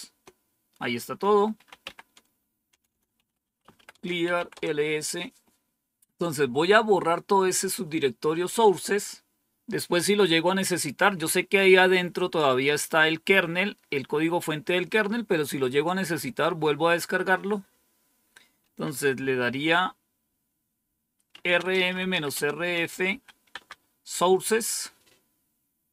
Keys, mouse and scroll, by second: 0.0 Return, 1.4-4.9 typing, 21.0-23.5 typing.